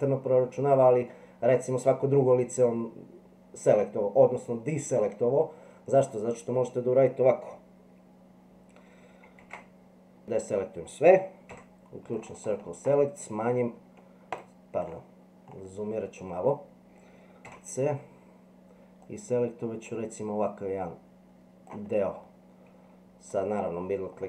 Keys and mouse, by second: 1.1 middle click, 6.0-7.1 middle drag, 9.4 alt+a, 11.5 c, 17.5 c.